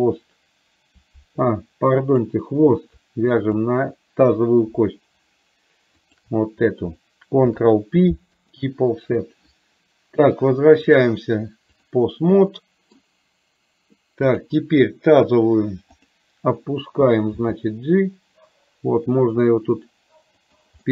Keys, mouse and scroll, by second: 2.1 click, 6.1 shift+click, 7.6 ctrl+p, 11.0-12.1 drag, 12.5-13.1 middle drag, 16.1 click, 17.5 g.